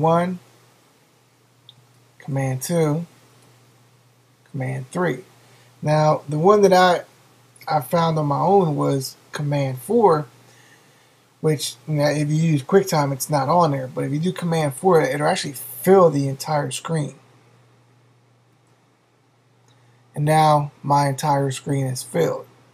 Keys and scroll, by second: 2.2 super+2, 4.4 super+3, 18.5 super+4.